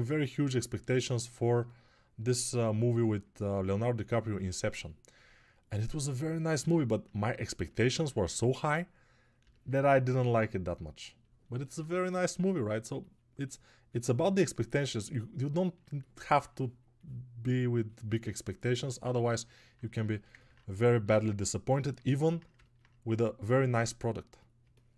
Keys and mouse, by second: 10.1 1.